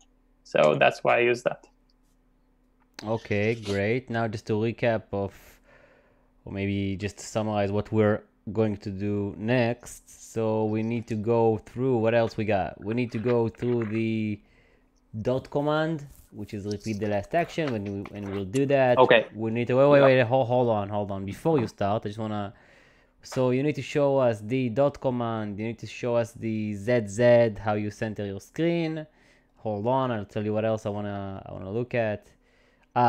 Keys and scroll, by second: 0.0-0.7 typing.